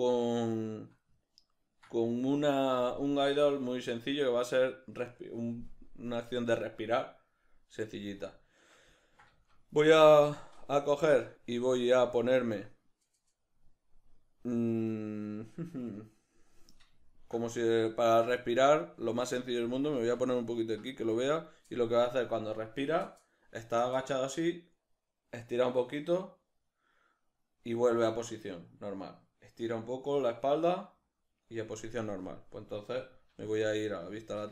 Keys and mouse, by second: 33.3 alt+q, 34.3 shift+middle click.